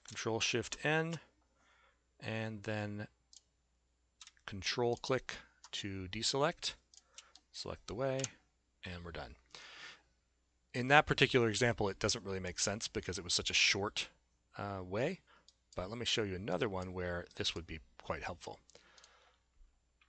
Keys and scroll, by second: 0.6 ctrl+shift+n, 8.2 Delete.